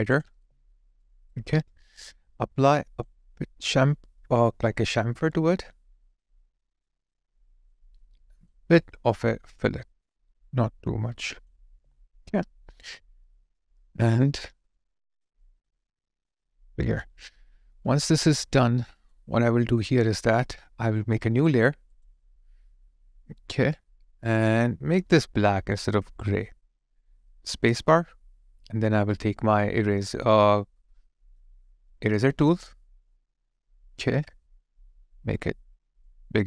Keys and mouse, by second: 0.4 alt+click, 1.0 alt+right click, 11.8 alt+click, 17.6 alt+click, 27.7 space.